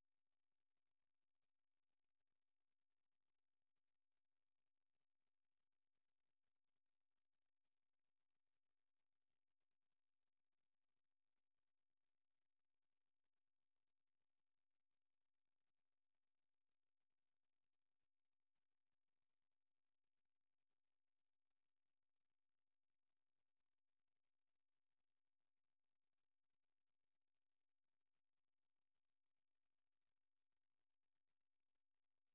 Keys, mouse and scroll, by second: 1.6 click, 3.1 click, 4.2 scroll down 1, 5.1 Return, 7.6 click, 29.8 click, 30.9 click, 32.2-32.3 drag.